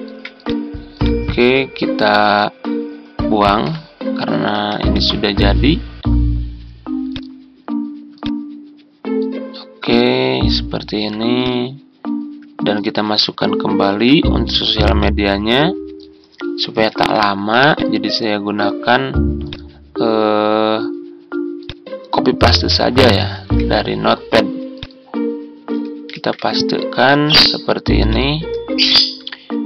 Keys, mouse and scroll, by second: 3.6 Delete, 4.4 z, 12.9 alt+Tab, 13.8 Tab, 16.8 ctrl+c, 23.3 ctrl+v, 26.0 ctrl+v.